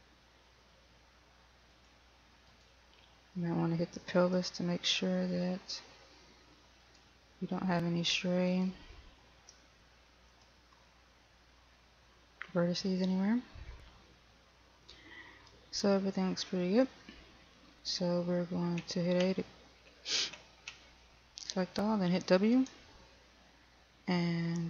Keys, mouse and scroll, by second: 2.0 click, 2.8 right click, 4.5 r, 7.2 right click, 10.7 click, 19.6 a, 23.0 w.